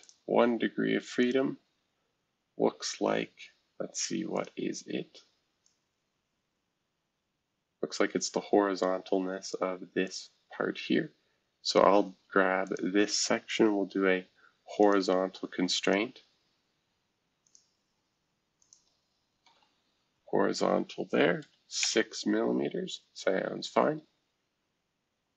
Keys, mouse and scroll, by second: 0.0 click, 1.2 click, 4.4 click, 5.6-9.5 drag, 10.0 click, 10.4-11.0 scroll down 1, 11.0-11.7 scroll down 1, 11.7 click, 12.6 shift+click, 13.3 shift+click, 14.8 click, 15.8 click, 17.4 click, 18.6 shift+click, 19.4 shift+h, 21.4 6, 21.8 Return, 22.5-23.1 scroll down 2.